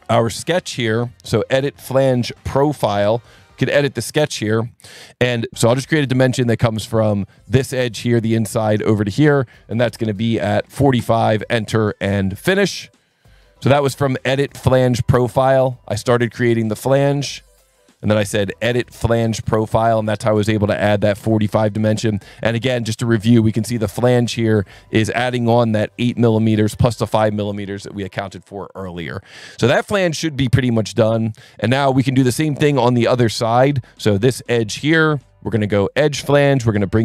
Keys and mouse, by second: 4.1 click, 5.5 click, 7.3 click, 8.6 click, 9.3 click, 10.6 KP_4, 10.8 KP_5, 11.0 KP_Enter, 12.4 click, 12.9 click, 16.1 right click, 16.8 click, 18.3 alt+1, 18.6 click, 19.2 click, 20.6 alt+1, 23.7 alt+1, 24.7 click, 25.9 click, 26.9 click, 28.8 alt+1, 30.6 click, 34.1 click, 35.8 click.